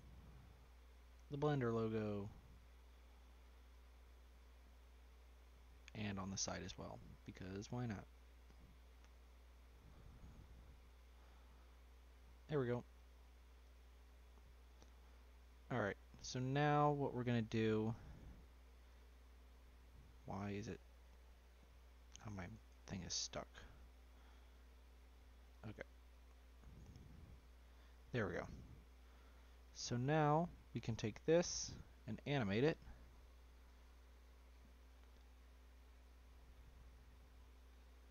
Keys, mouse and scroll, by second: 2.4 click, 3.7 click, 4.1-4.4 middle drag, 4.4-4.9 scroll down 6, 4.9-5.3 middle drag, 5.3-5.8 shift+scroll up 1, 5.8-7.1 scroll up 4, 7.1 click, 8.5 d, 12.2 click, 13.6 click, 13.9-14.3 middle drag, 14.3-14.6 scroll down 1, 14.6-16.4 middle drag, 16.4 scroll up 1, 16.5-17.8 middle drag, 17.8 click, 18.1-20.8 middle drag, 20.8 Delete, 21.6 scroll down 1, 21.6-22.3 middle drag, 22.3 scroll up 1, 22.5-23.0 right drag, 23.0 click, 23.5-25.4 middle drag, 25.4 click, 27.1 click, 27.5-29.0 shift+middle drag, 29.0-29.5 scroll up 2, 29.5 click, 30.2 click, 33.1 click, 36.9-38.1 drag.